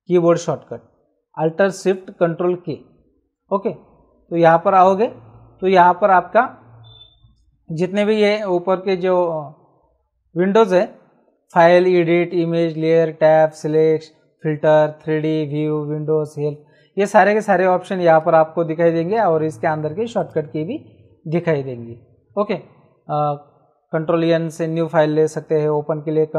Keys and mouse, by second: 4.4 click, 18.1 click, 20.1 click.